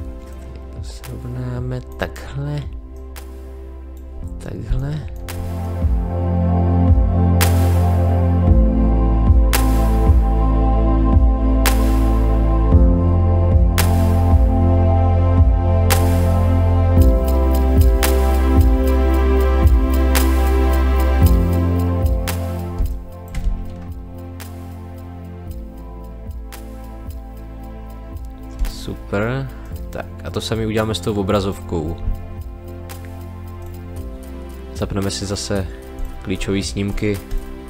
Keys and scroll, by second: 4.6 space, 7.0-10.5 typing, 10.1 ctrl+z, 10.7 ctrl+z, 11.6 space, 12.1 space, 13.2 space, 13.8 space, 14.6 space, 15.1 space, 16.3 space, 17.4 space, 18.5-21.0 typing, 22.7 space, 28.5 space.